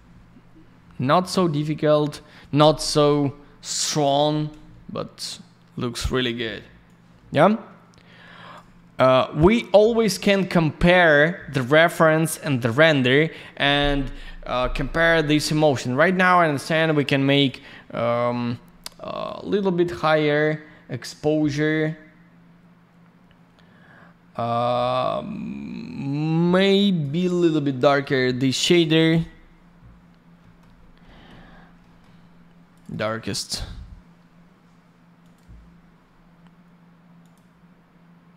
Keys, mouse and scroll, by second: 6.8 click, 9.3 click, 16.5 click, 19.2 click, 27.8 middle click, 27.9 middle click, 30.4 middle click, 30.6 middle click, 30.7 scroll down 1, 31.0 middle click, 31.4 scroll down 1, 31.7 middle click, 32.7 click, 32.8 click, 32.8 click, 33.0 double click, 35.2 click, 37.2 click.